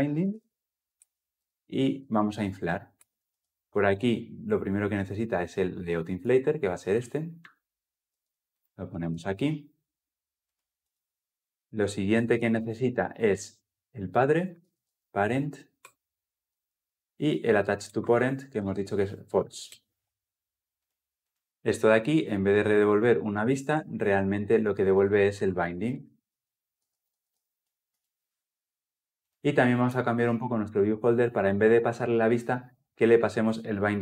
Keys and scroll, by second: 0.8 Return, 3.1 ctrl+p, 7.9 ctrl+x, 8.9 ctrl+v, 12.7 ctrl+p, 15.6 ctrl+p, 15.6 Return, 21.5 ctrl+z, 27.8 Return.